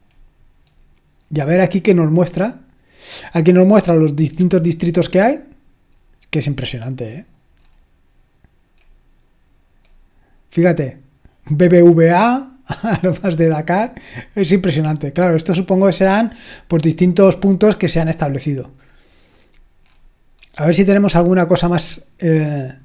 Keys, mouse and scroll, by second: 2.0-4.3 scroll up 2, 4.3-4.8 drag, 5.2-5.7 scroll up 2, 6.0-6.8 scroll up 2, 6.8 click, 7.6-8.8 scroll up 2, 8.8-9.9 scroll up 1, 9.9-13.8 scroll up 1, 13.8 click, 15.0-15.8 drag, 15.8-18.0 scroll up 4, 18.0-18.9 scroll up 1, 18.9-20.9 scroll up 2, 20.9-21.7 scroll down 2, 22.2-22.8 scroll up 2.